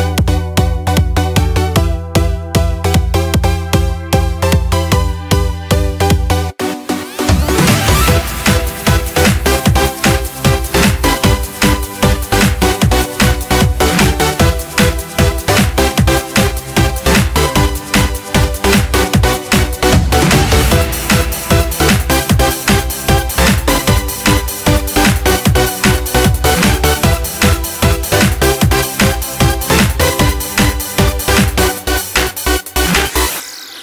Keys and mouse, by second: 0.5 click, 2.0 click, 7.2 click, 8.5 click, 9.9 click, 10.9-14.6 middle drag, 16.2 click, 18.8 click, 20.3 click, 21.5 click, 25.2 click, 28.5 click, 30.1 click.